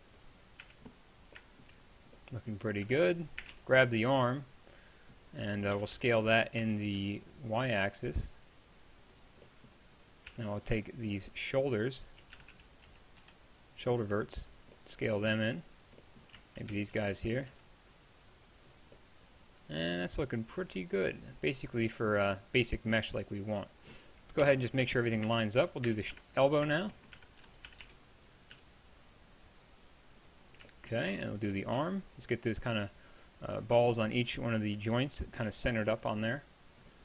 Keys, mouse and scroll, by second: 0.6 a, 2.9 a, 3.0 b, 3.4 a, 3.5 b, 5.8 s, 9.5 middle click, 10.3 z, 12.4 s, 16.7 s, 24.4 KP_7, 25.3 Tab, 26.1-28.5 typing, 31.0 a, 31.1 b, 31.8 g.